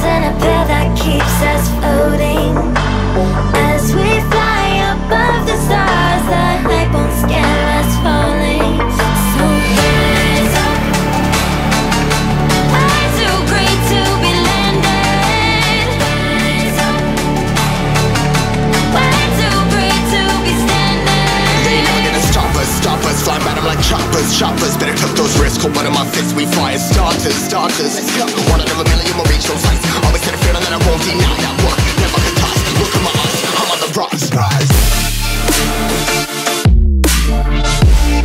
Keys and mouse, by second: 0.6-3.3 drag, 9.5-25.4 drag, 26.5-37.2 drag.